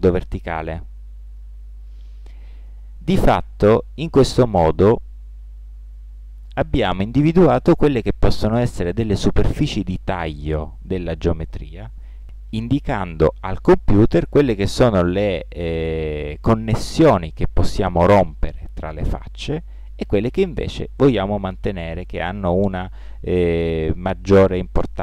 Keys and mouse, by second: 0.1 middle click.